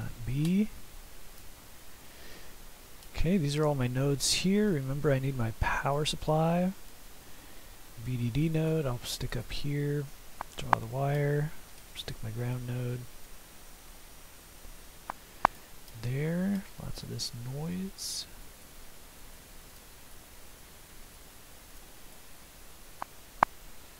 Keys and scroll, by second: 1.6 typing.